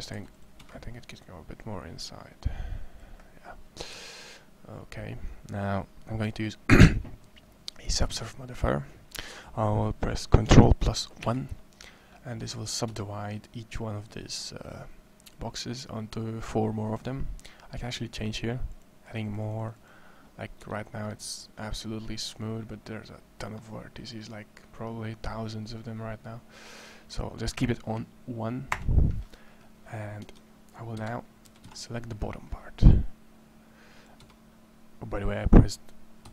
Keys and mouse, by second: 0.6 c, 3.7 Tab, 11.0 ctrl+1, 12.7 Tab, 18.5 click, 20.4 Tab, 25.5-25.8 middle drag, 26.9-29.2 drag, 30.1 Tab, 30.7 KP_1, 31.2 a, 31.5 c, 36.0-36.3 typing.